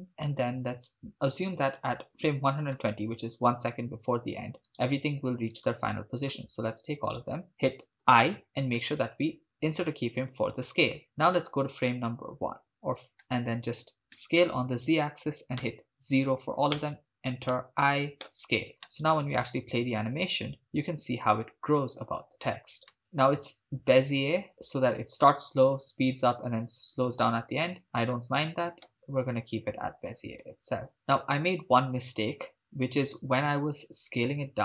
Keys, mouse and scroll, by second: 1.7 click, 4.7 right click, 5.6-7.3 shift+right drag, 8.0 i, 12.7 click, 14.2 s, 14.4 z, 15.7 0, 16.8 Return, 17.5 i, 18.8 shift+space, 22.9 shift+space, 23.5-28.7 drag, 28.8 shift+space, 30.4 shift+space, 30.9-33.5 drag.